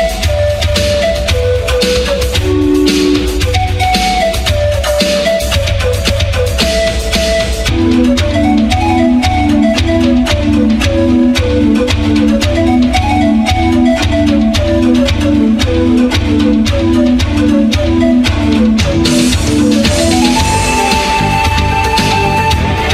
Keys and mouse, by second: 0.6-1.6 middle drag, 1.6 q, 2.1 ctrl+a, 3.3 ctrl+a, 5.7 z, 6.5 ctrl+a, 7.0-9.0 drag, 9.0 a, 9.7-15.4 drag, 15.4 ctrl+a, 17.1 Tab, 17.3 a, 17.5 a, 17.8 s, 18.5 Tab, 18.9 ctrl+a, 21.5 a, 22.2 click.